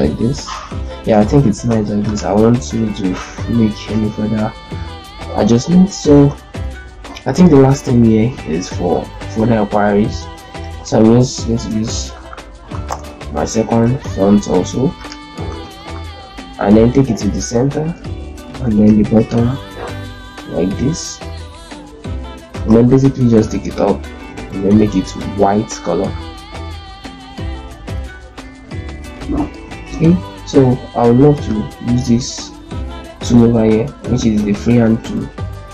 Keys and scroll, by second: 0.9 ctrl+space, 1.5 z, 6.0 ctrl+space, 6.4 F4, 11.0-12.3 typing, 12.6 Return, 15.4 ctrl+space, 17.6 shift+c, 18.4 b, 20.0 shift+z, 22.5 ctrl+space, 26.3 shift+Up, 26.4 shift+Up, 26.7-27.7 shift+Up, 27.4 shift+Up, 28.0 shift+Up, 28.2 shift+Up, 28.6 shift+Up.